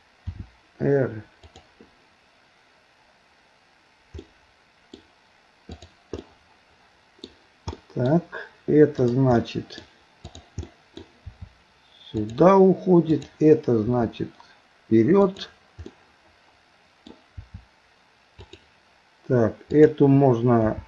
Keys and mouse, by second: 0.3 r, 4.3 middle click, 6.2-7.3 middle drag, 7.8 middle click, 9.0 click, 9.4 middle click, 10.3 click, 10.7 middle click, 11.3 r, 13.1 click, 13.9 r, 15.9-17.1 middle drag, 17.4 r, 19.7 click, 20.7 g.